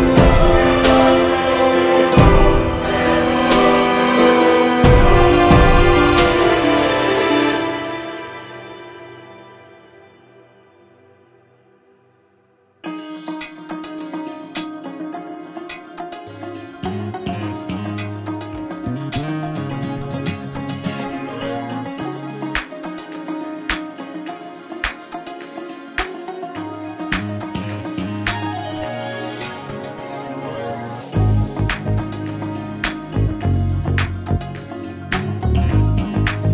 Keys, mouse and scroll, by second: 0.1 click, 0.5 scroll down 3, 0.8 click, 1.1 g, 4.0 Tab, 4.2 right click, 5.1 click, 6.2-6.6 scroll down 11, 6.6 ctrl+KP_3, 7.0 g, 7.4-8.8 scroll down 5, 11.0 scroll down 1, 11.2 middle drag, 11.4 scroll up 3, 11.5 click, 11.8 g, 15.2 click, 19.2-22.4 drag, 20.9 scroll down 2, 22.6 middle click, 23.5-33.7 drag, 33.7-34.4 shift+middle drag, 34.4 scroll up 1, 34.6 space, 35.1 space, 35.3 space.